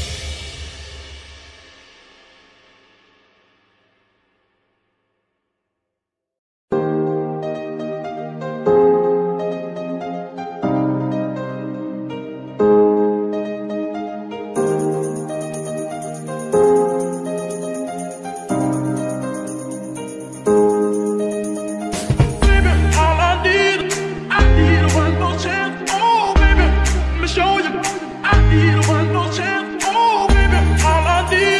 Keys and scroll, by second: 0.4 z, 3.9 ctrl+Tab, 4.3 ctrl+g, 5.2 Escape, 6.0 g, 7.8 Escape, 8.3 ctrl+Tab, 10.0 Tab, 10.3 Tab, 11.3 Tab, 11.7 z, 18.9 ctrl+Tab, 19.3 z, 19.7 g, 21.7 Escape, 23.2 g, 23.3 y, 24.1 Escape, 25.0 g, 25.2 y, 28.2 Escape.